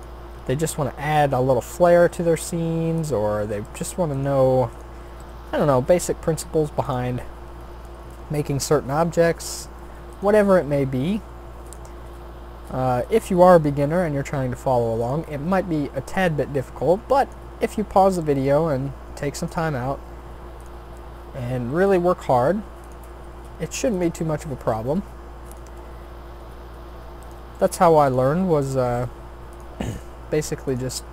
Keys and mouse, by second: 0.3 s, 2.0 g, 4.1-6.0 drag, 5.2 g, 8.8 shift+d, 10.5 r, 12.1 e, 13.4 s, 15.2 e, 16.5 r, 17.9 e, 20.0 s, 20.7 e, 22.2 r, 23.1 s, 24.2 g, 25.7 e, 27.5 r, 28.4 s, 29.9 g, 31.0 e.